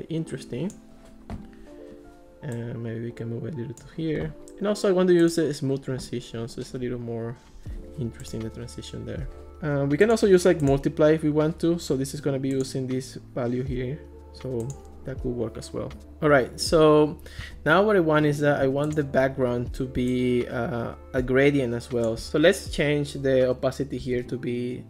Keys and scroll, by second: 23.8-24.8 typing.